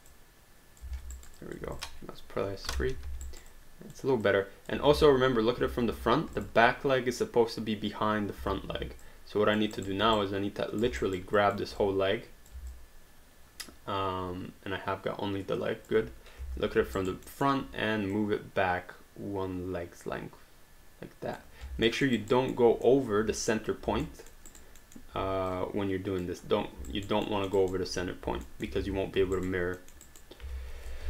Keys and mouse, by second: 0.1 click, 1.1 alt+d, 1.1 alt+right click, 1.3 alt+click, 1.7 click, 2.7 3, 3.0 alt+d, 3.3 alt+right click, 3.5 alt+click, 4.9 space, 6.4 click, 8.4 space, 9.0 alt+click, 9.9 alt+right click, 10.2 right click, 11.1 alt+right click, 11.4 alt+click, 11.8 click, 12.7 alt+click, 16.4 space, 17.0 alt+right click, 17.3 alt+middle click, 18.1 click, 21.9 alt+middle click, 22.2 alt+right click, 22.6 alt+middle click, 24.1 alt+middle click, 24.5 alt+right click, 24.9 alt+middle click, 25.5 click, 26.9 alt+right click, 27.5 alt+middle click, 27.6 alt+right click, 28.5 alt+middle click, 28.8 ctrl+z, 29.3 alt+right click, 29.8 alt+middle click, 30.2 alt+right click, 30.4 alt+d.